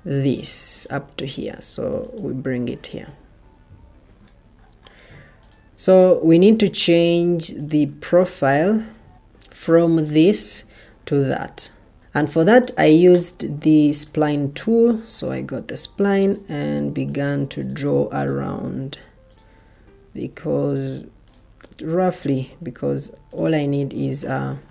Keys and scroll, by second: 4.1 Escape, 6.3 ctrl+d, 10.5 Escape.